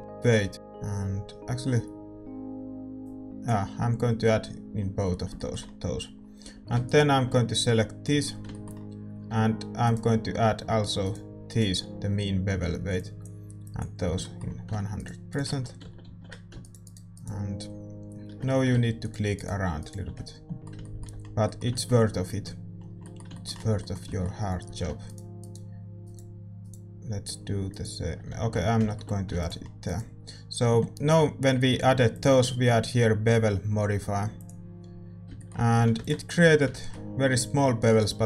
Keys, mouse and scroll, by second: 0.0-4.8 drag, 4.8-11.0 middle drag, 6.4 a, 6.8-13.6 right drag, 13.0-15.8 drag, 14.2-16.6 middle drag, 14.9-20.6 right drag, 15.8 ctrl+z, 20.6-26.0 middle drag, 24.6 a, 25.0-29.5 right drag, 28.2 a, 28.5 Tab, 28.8 click, 29.5 ctrl+s, 29.5-34.7 middle drag, 29.8-34.7 right drag, 35.3 middle click, 35.7 a, 36.2 ctrl+s.